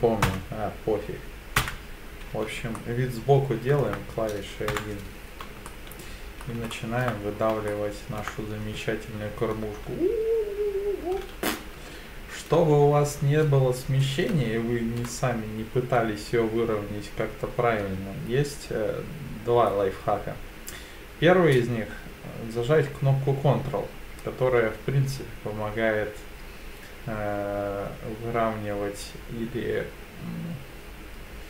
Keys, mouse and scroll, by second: 0.3 KP_5, 1.6 KP_1, 2.8-3.8 shift+middle drag, 4.7 KP_1, 5.7 shift+middle click, 6.7 shift+middle click, 7.3-7.7 scroll down 3, 7.7 shift+middle click, 8.6 e.